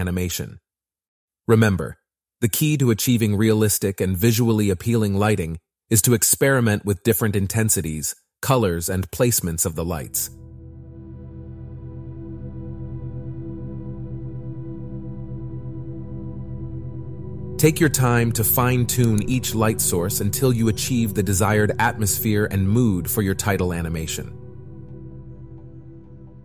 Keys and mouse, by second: 2.3 shift+d, 5.0 click, 5.8 middle click, 6.7 shift+middle click, 7.3 shift+click, 7.8 shift+d, 14.0 g, 15.9 KP_1, 17.1 s, 18.3 click, 19.7 click, 20.4 middle click, 25.4 click.